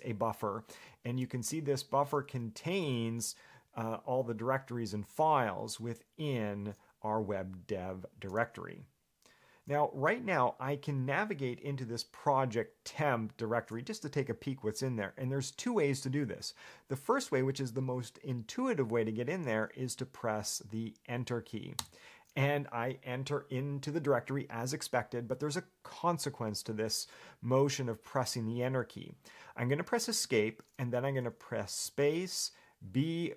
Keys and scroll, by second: 2.0 Escape, 2.3 j, 3.0 k, 22.0 Return, 30.4 Escape.